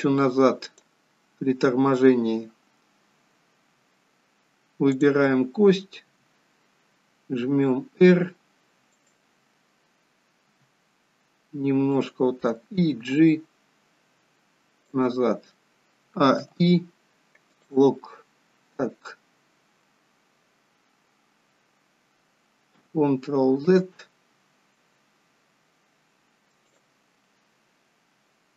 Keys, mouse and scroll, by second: 5.0 click, 6.2 r, 10.5 r, 13.1 g, 16.0 a, 16.4 i, 24.1 ctrl+z, 26.7 click.